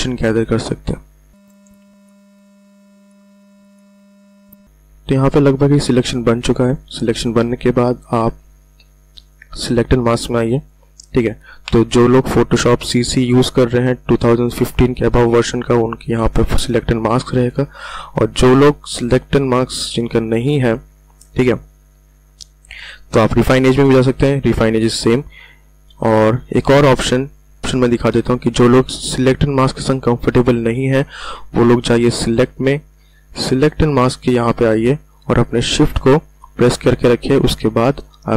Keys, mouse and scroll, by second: 0.0 alt+click, 1.3 space, 1.4 click, 1.5 ctrl+alt+scroll down 1, 1.7 space, 1.8 click, 3.1 space, 3.1 click, 3.5 space, 3.6-4.2 ctrl+alt+scroll down 2, 3.8 space, 3.8 click, 4.0 space, 10.6 click, 27.2 click, 32.3 click.